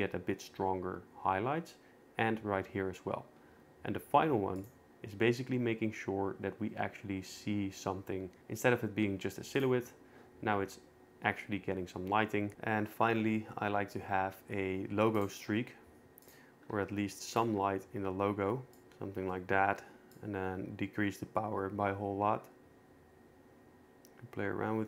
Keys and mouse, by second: 4.6 click, 9.6 click, 15.2 shift+right click, 15.3 shift+a, 16.7 g, 17.3 click, 17.5 r, 18.8 g, 20.1-22.6 shift+drag, 22.6 g, 22.6 y.